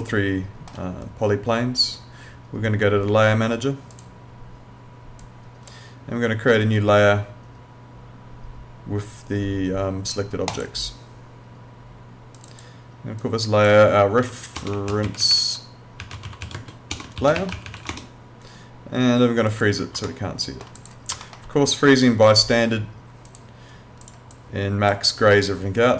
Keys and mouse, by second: 3.9 click, 10.5 click, 14.2-17.8 typing, 19.5 click, 20.1 alt+middle click, 20.8 click, 21.3 alt+middle click, 23.3 click.